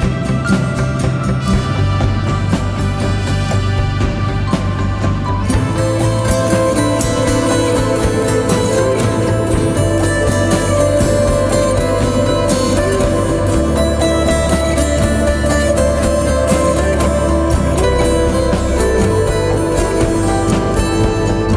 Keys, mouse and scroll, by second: 0.0-0.9 typing, 0.1 double click, 1.1 double click, 2.7-3.2 typing, 3.2 double click, 7.7 typing.